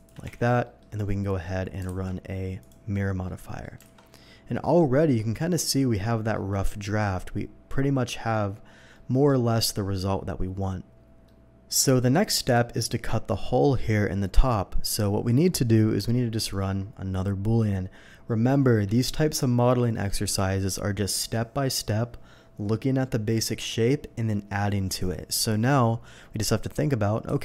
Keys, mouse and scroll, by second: 0.2 Tab, 0.6 middle drag, 1.2 middle click, 1.8 alt+x, 2.6 click, 3.0 scroll down 1, 3.2-3.6 middle drag, 4.1 alt+a, 4.1-4.8 middle drag, 4.9-6.3 middle drag, 6.5 scroll up 1, 8.9-9.2 middle drag, 11.2-11.8 middle drag, 12.1 scroll down 1, 12.5 middle drag, 27.3 KP_7.